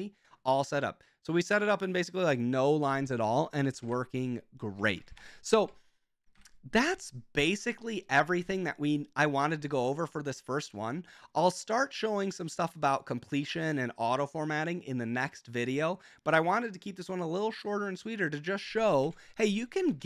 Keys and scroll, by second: 3.9-5.6 typing, 6.4 super+j, 19.1 super+k, 19.5 Escape, 20.0 :.